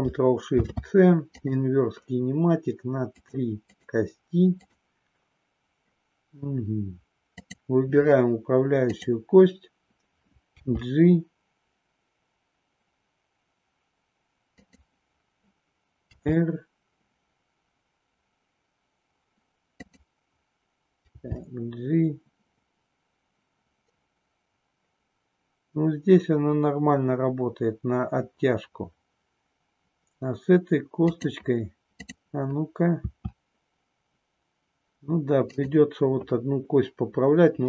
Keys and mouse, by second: 0.4 ctrl+shift+c, 3.0 click, 3.8 click, 4.5 click, 7.3 click, 10.5 g, 14.7 click, 16.0 r, 19.9 click, 21.1 g, 31.2 click, 33.0 r, 35.5 click.